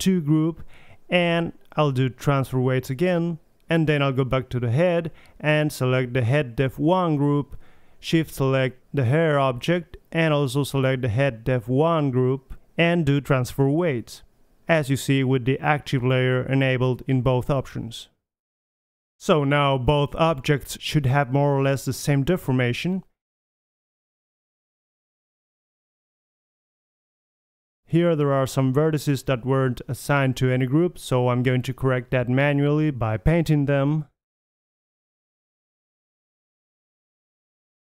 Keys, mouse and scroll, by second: 1.0-2.8 drag, 6.2-8.3 right drag, 7.8-10.0 drag, 10.0-11.7 right drag, 11.7 middle click, 12.3-14.0 drag, 14.3-16.6 drag, 23.0 click, 23.9 right drag, 24.0-24.9 middle drag, 24.2 r, 26.1-27.2 middle drag, 26.5 KP_3, 27.2-28.4 drag, 27.6 r, 28.6-29.1 drag, 29.1-29.6 right drag, 30.0-30.6 drag, 30.8 click, 31.1-31.7 middle drag, 31.7 middle click, 32.6-33.2 drag, 33.2 middle drag, 33.5 click, 34.4 middle click, 34.6-35.9 drag, 35.1 right drag, 35.9-37.0 middle drag, 36.5 KP_3, 37.0-37.8 drag.